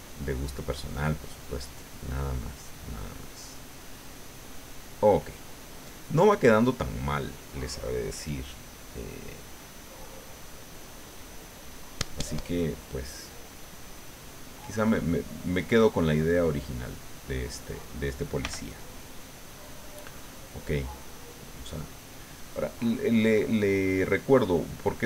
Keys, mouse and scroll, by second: 1.7-3.7 drag, 3.9-5.0 drag, 5.4-7.2 drag, 9.3 click, 10.2 click, 10.4 click, 10.7 click, 14.4 click, 15.0 middle click, 16.3 middle click, 17.1-18.2 drag, 18.4 f, 18.9 click, 19.3-23.7 drag, 23.9 middle click.